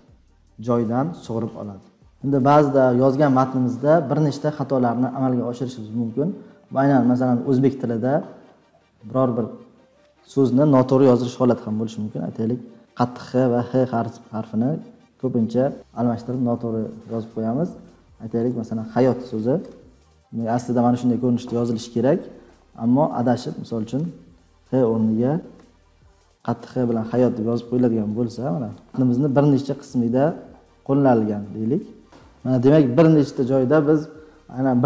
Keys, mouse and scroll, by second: 1.7-2.0 scroll up 8, 2.7 click, 2.8-8.1 scroll up 53, 8.1-8.8 scroll down 14, 18.5-20.1 drag, 24.2 BackSpace, 25.5 x, 28.7 click, 28.9 ctrl+c, 28.9 click, 29.9 ctrl+v, 30.2-30.6 scroll down 10, 30.8 scroll, 32.0 ctrl+scroll, 32.1 click, 32.9 click, 33.0 click.